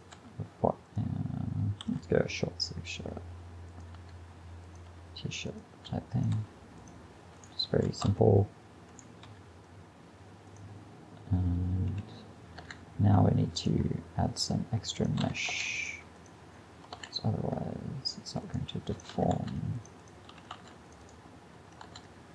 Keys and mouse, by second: 0.2 g, 1.9 g, 4.0 r, 4.9 g, 5.8 r, 6.4 g, 8.1 a, 9.3 g, 11.9 a, 12.6 ctrl+r, 15.3 a, 15.5 ctrl+r, 17.0 ctrl+r, 19.1 a, 19.4 ctrl+r, 20.4 a, 20.6 ctrl+r, 21.9 ctrl+r.